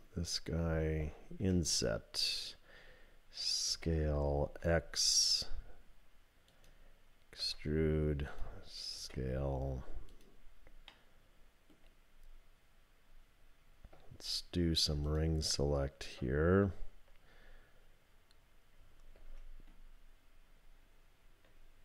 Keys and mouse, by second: 1.4 i, 3.7 s, 7.4 e, 9.0 s, 10.9 click, 15.1 alt+click, 19.2 ctrl+r.